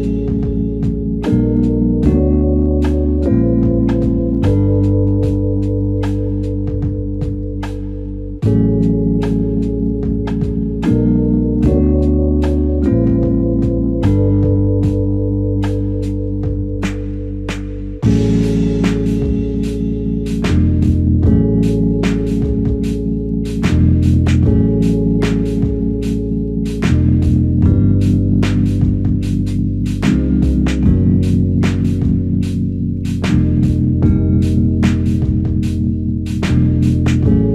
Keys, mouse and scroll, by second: 8.6 alt+click, 9.7-10.1 typing, 12.9 typing, 15.6 double click, 32.4 typing, 34.4 alt+shift+click.